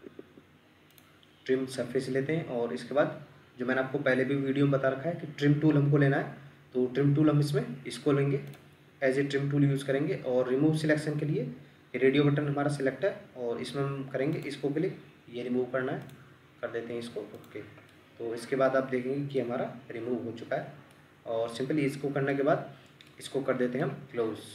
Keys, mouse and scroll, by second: 17.9 middle click, 19.9 scroll down 1, 20.9 middle click, 22.5 scroll up 1, 23.1 middle click.